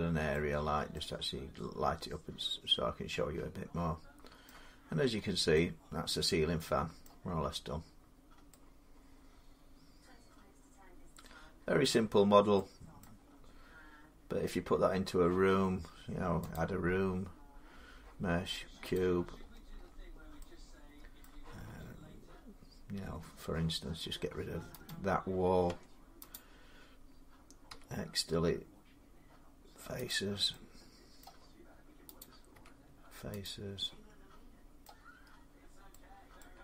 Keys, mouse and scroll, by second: 0.1 middle click, 0.4-0.7 scroll down 2, 4.2 middle click, 4.2-4.9 scroll, 4.9 Tab, 6.8-8.7 middle click, 7.1-7.8 scroll, 10.8 scroll up 7, 11.6 middle click, 11.7 scroll down 5, 12.8 middle click, 13.0-15.3 scroll, 16.3 click, 17.2 scroll down 5, 18.7 click, 18.8 click, 19.2 scroll, 19.2-19.6 scroll down 6, 19.6 scroll, 19.6 middle click, 20.1 middle click, 20.3 middle click, 21.0 middle click, 22.1 scroll, 24.7 click, 25.5 Tab, 26.1 click, 27.5 x, 29.9 click, 31.0 middle click, 32.0 click, 32.3 x, 33.2 click, 34.6 middle click, 35.0-35.7 scroll up 5, 36.2 middle click.